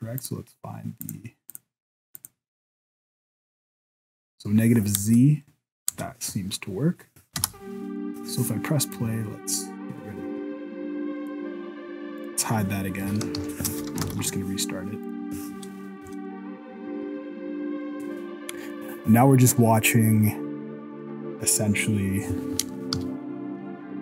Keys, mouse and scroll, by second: 0.2 click, 1.0 click, 1.5 click, 2.2 click, 3.0 middle click, 5.0 KP_0, 5.9 KP_0, 7.4 space, 9.0 right click, 11.3 click, 12.3 click, 13.0 alt+a, 13.4 ctrl+s, 14.0 shift+Left, 15.0 right click, 16.0 KP_0, 23.0 z.